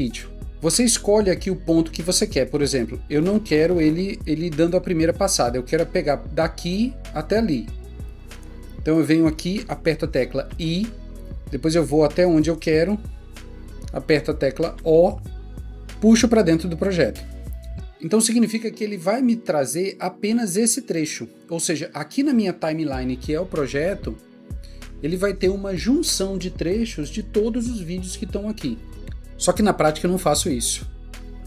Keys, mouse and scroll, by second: 10.5 i, 14.8 o, 30.4 double click, 31.2 Delete.